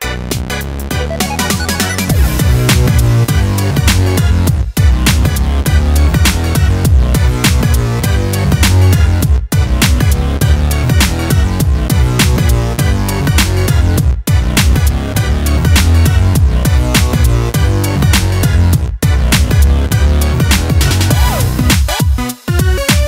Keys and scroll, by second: 6.4-8.1 ctrl+d, 18.4 ctrl+space, 19.0 ctrl+space.